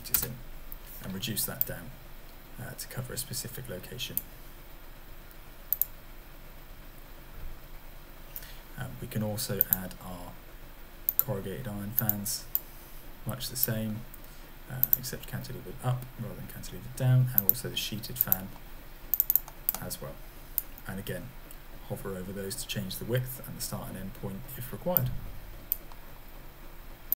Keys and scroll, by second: 0.1 Return.